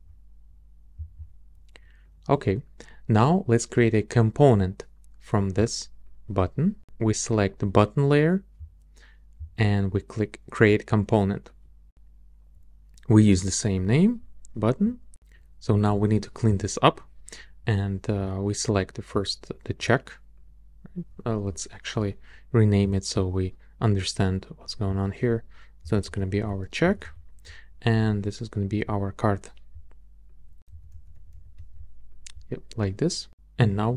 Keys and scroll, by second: 25.6-27.5 typing, 30.4-31.8 typing.